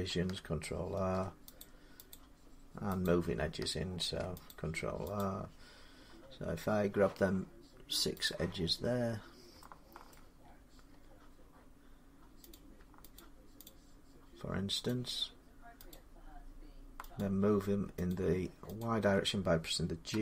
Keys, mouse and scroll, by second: 0.8 ctrl+r, 1.0 middle click, 1.4 click, 1.9 click, 3.1 click, 3.8 ctrl+r, 4.3 click, 5.0 click, 8.1 click, 9.9-10.4 shift+middle click, 10.2 middle click, 10.7 middle click, 10.9 middle click, 11.0-12.3 scroll down 3, 12.3 click, 13.0 shift+click, 14.6 click, 14.7 shift+click, 15.8 click, 17.0 shift+click, 18.6 shift+click, 19.9-20.2 typing.